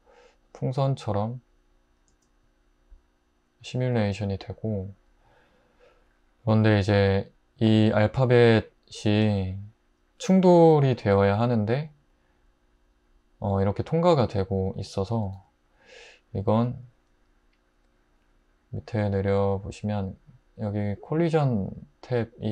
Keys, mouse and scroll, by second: 2.1 space, 4.2 click, 15.4-17.7 middle drag.